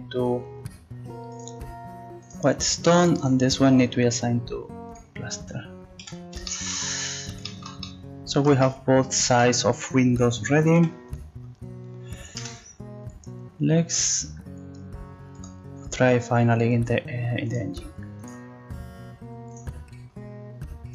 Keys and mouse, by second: 2.3-6.0 drag, 6.0 a, 6.5-8.0 drag, 10.8 ctrl+s, 15.3-16.5 drag.